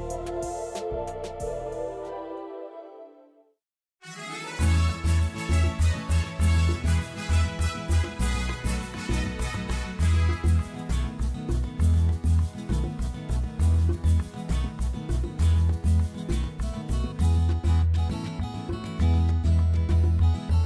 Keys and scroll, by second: 3.1 4, 4.0 Return, 15.8 7, 16.3 Return.